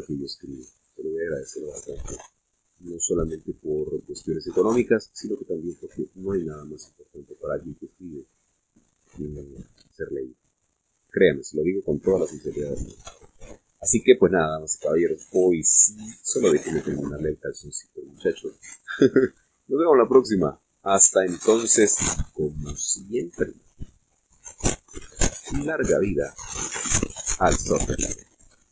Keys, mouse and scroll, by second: 1.9-3.4 drag, 3.8 click, 5.1 click, 6.7-9.7 drag, 10.1-11.3 drag, 11.6-12.7 drag, 14.0-15.6 drag, 15.9 click, 16.9 click, 17.6 click, 19.4 click, 21.0 click, 22.7 click, 25.1 click, 26.8 click, 27.7 middle click.